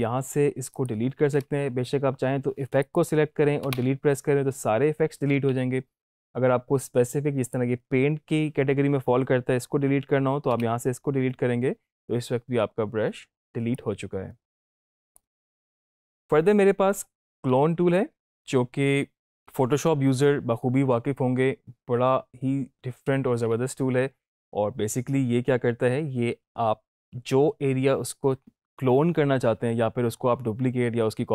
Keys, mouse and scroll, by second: 0.7 click, 5.3 ctrl+z, 7.3 click, 13.7-15.3 drag.